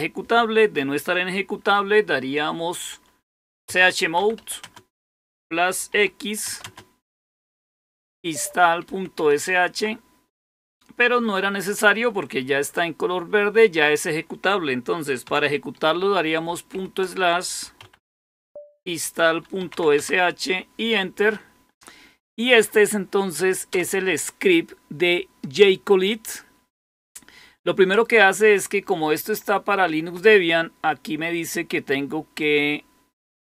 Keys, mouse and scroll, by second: 3.4-4.8 typing, 5.8-10.7 typing, 9.6 Tab, 17.3-20.1 typing.